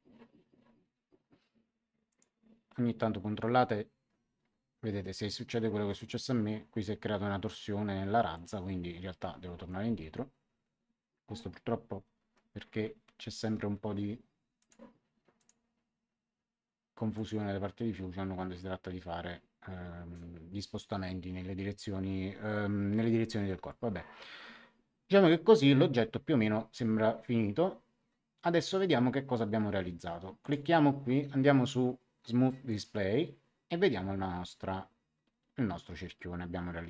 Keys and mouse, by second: 2.0 click, 9.5 Escape, 14.5 click, 17.1 click, 30.4 click, 32.6 click.